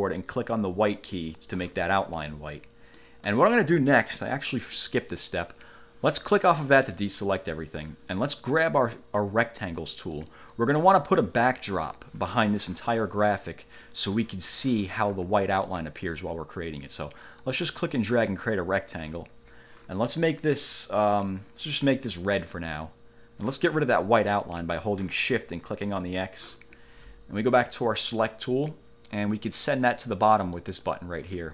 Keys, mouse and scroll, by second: 1.3 shift+click, 3.1 click, 7.0 click, 10.3 click, 17.6-19.5 drag, 22.5 click, 26.1 shift+click, 28.2 click, 30.7 click.